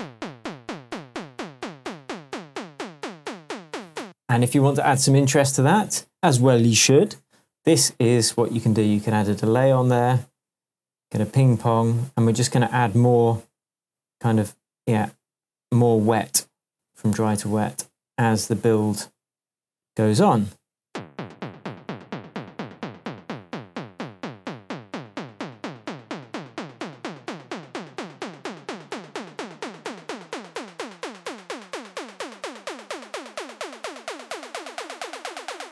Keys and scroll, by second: 4.0 space, 20.8 space.